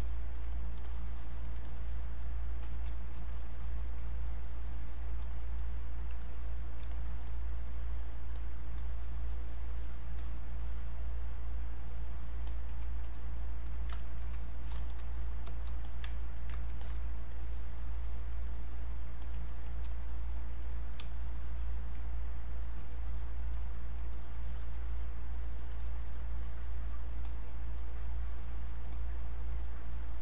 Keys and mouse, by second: 0.9 alt+click, 1.6 click, 2.6 alt+click, 2.8 click, 3.2 alt+click, 4.2-6.2 drag, 6.2 click, 7.7 click, 8.4-10.2 drag, 10.2 click, 11.8 alt+click, 13.2 click, 14.0 ctrl+right click, 14.7 click, 15.2 click, 15.8 click, 16.2 ctrl+right click, 16.8 alt+click, 17.3 click, 18.5 alt+click, 19.2 click, 21.1 alt+click, 22.2 click, 23.6 alt+click, 24.1 click, 25.8 click, 26.4 click, 27.2 alt+click, 27.8 click, 28.9 alt+click, 29.6 click.